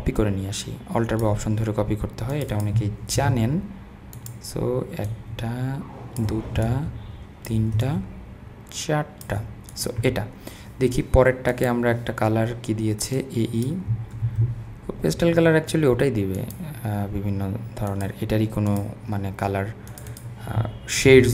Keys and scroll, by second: 3.2 super+v, 14.2 super+c, 21.1 super+v.